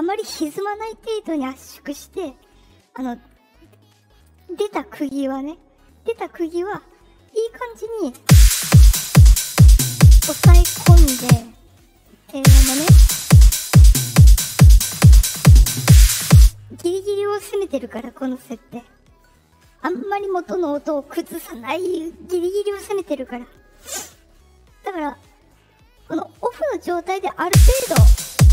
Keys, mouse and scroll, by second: 4.2 click, 6.5 click, 8.1 space, 11.1 space, 11.9 click, 12.3 space, 15.5 click, 16.3 space, 26.7 click, 27.4 space.